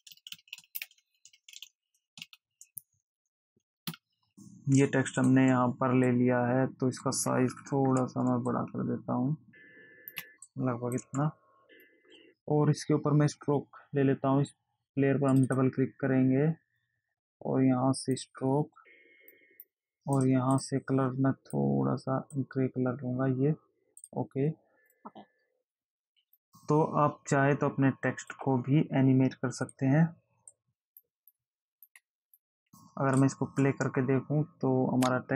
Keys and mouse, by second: 0.0 space, 1.5 i, 5.6 click, 15.7 click, 18.5 click, 19.5 click, 20.5 click, 21.9 click, 24.4 click, 25.1 click, 26.7 click, 30.0 click, 32.6 click, 33.7 space.